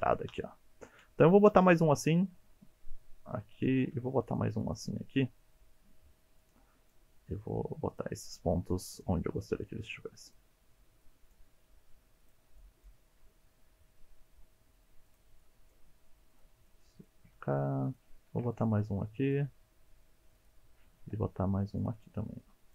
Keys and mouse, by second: 3.6 click, 3.9 ctrl+r, 4.6 click, 6.1 1, 6.4 click, 7.2 g, 7.9 click, 8.7 click, 9.2 g, 10.3 click, 11.0 click, 11.5 g, 12.2 click, 12.7 click, 13.1 g, 15.1 click, 15.6 click, 15.9 g, 16.3 click, 16.7 click, 17.2 g, 17.9 click, 18.3 ctrl+r, 18.7 click, 19.1 click, 19.5 g, 20.4 click, 21.0 ctrl+r, 22.0 click, 22.4 click.